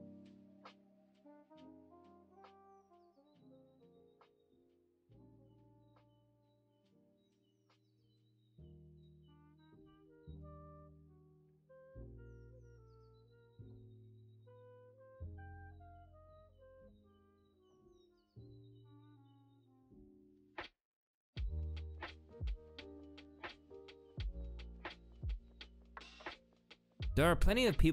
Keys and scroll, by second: 0.9-1.7 typing, 3.6-4.4 typing, 4.1 Return, 6.0 ctrl+alt+y, 6.7 ctrl+z, 7.2 ctrl+alt+y, 9.8 ctrl+space, 11.2 typing, 15.8-16.1 typing, 17.6-18.3 typing, 19.7-22.2 typing, 26.3 space.